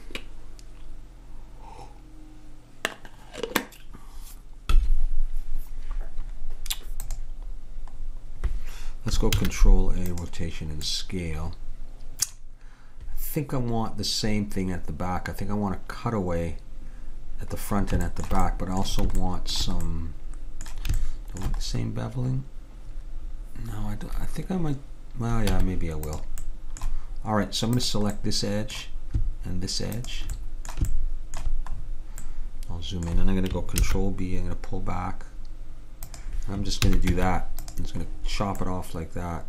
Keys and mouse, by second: 7.1-8.9 drag, 9.4 ctrl+a, 10.9 middle click, 18.1-25.3 middle drag, 25.6 Tab, 26.5-27.8 middle drag, 27.8-31.8 drag, 33.8 ctrl+b, 36.9 a, 37.2 Tab.